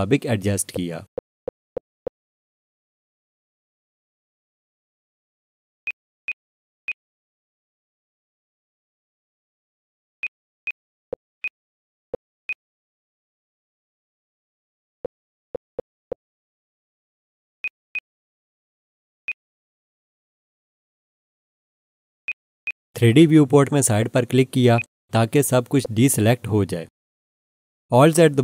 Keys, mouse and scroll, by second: 0.5 scroll up 1, 1.0-4.5 scroll down 1, 5.8 click, 6.2 double click, 6.8 click, 8.4 g, 10.2 click, 10.6 double click, 10.9 scroll down 1, 11.4 alt+shift+click, 11.9-12.4 scroll up 1, 12.5 click, 14.4 g, 14.8-15.3 scroll down 1, 17.6 scroll up 1, 17.6 click, 17.9 double click, 19.2 click, 20.9 g, 22.2 click, 22.6 double click, 23.8 scroll down 1, 24.7 click, 25.6-28.3 scroll down 1.